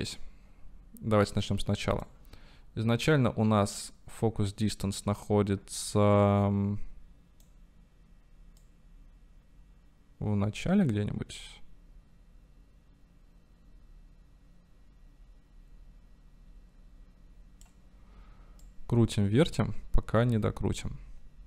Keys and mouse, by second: 1.4 click, 3.0-7.5 drag, 8.6-17.8 drag, 18.6-21.4 drag.